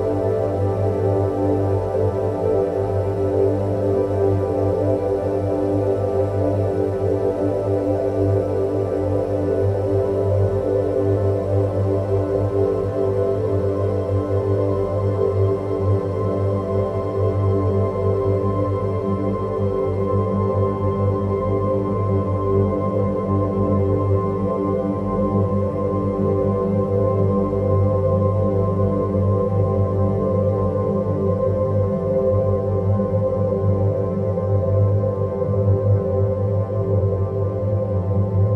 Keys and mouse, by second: 0.3 g, 1.5 g, 5.8 g, 8.3 g, 11.6 g, 13.4 g, 19.8 click, 22.7 Tab, 24.7 s, 32.0 ctrl+z, 33.1 a, 33.8 s.